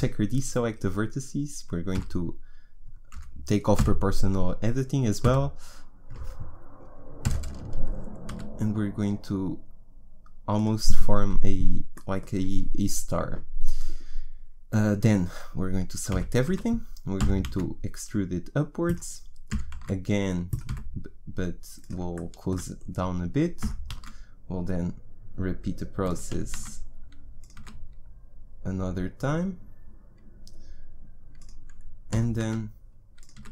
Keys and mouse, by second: 1.9 s, 3.8 o, 5.2 s, 7.2 o, 8.3 s, 11.9-16.1 drag, 16.1 a, 16.5 a, 17.2 e, 19.5 e, 20.6 s, 22.3 click, 23.6 e, 26.3 e, 27.5 s, 32.1 e, 33.4 s.